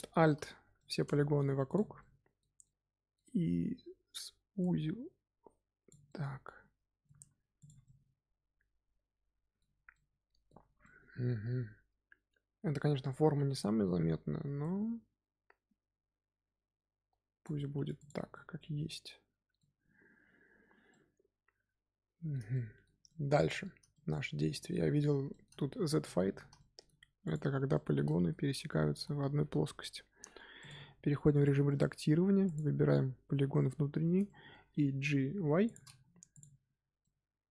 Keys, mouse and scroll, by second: 1.6 click, 1.9-4.5 middle drag, 4.5 click, 6.0-7.1 middle drag, 7.1 Tab, 7.5 click, 7.8-9.7 middle drag, 9.7 scroll down 2, 9.9-10.6 middle drag, 10.6 scroll down 1, 10.8-13.1 middle drag, 13.1-14.5 scroll up 3, 13.3 Tab, 14.5 click, 17.7 Tab, 17.9 click, 18.1 scroll down 2, 18.3-20.5 middle drag, 20.5-20.8 scroll down 1, 20.8-23.6 middle drag, 23.6 scroll down 1, 23.8-25.5 shift+middle drag, 25.5-26.5 scroll up 8, 25.9 middle drag, 26.5 shift+middle click, 26.8-27.2 scroll up 3, 27.2 click, 27.5 scroll down 4, 27.7 shift+middle click, 28.5 Tab, 28.8 z, 30.5 click, 31.4-32.4 shift+middle drag, 32.4 click, 33.3 z, 33.5-35.2 middle drag, 35.2 g, 35.9 scroll down 2, 36.0 Tab, 36.3 click, 36.7 scroll down 2, 36.9-37.5 middle drag.